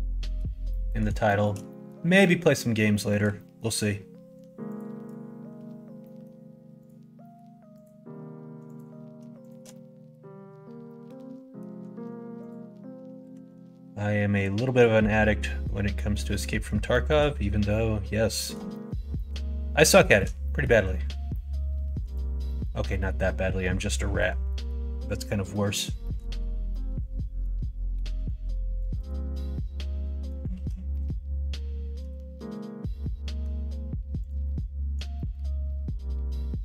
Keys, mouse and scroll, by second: 0.6 middle click, 1.2 shift+middle click, 1.6 middle click, 2.1 middle click, 2.9 shift+middle click, 3.3 middle click, 4.6 shift+click, 6.0 middle click, 7.1 middle click, 7.7 click, 8.6 click, 9.4 shift+click, 9.7 middle click, 10.8 middle click, 13.3 s, 14.6 click, 15.2 click, 16.1 click, 16.9 shift+middle click, 17.3 middle click, 18.3 middle click, 18.7 middle click, 19.1 middle click, 20.0 shift+middle click, 20.5 middle click, 21.3 middle click, 22.0 click, 22.4 middle click, 23.9 middle click, 24.4 middle click, 25.4 middle click, 26.0 shift+middle click, 26.7 middle click, 28.3 ctrl+r, 29.4 middle click, 30.5 ctrl+z, 30.8-33.4 middle drag, 34.2 click, 34.4 middle click, 35.1 shift+middle click, 35.6 middle click.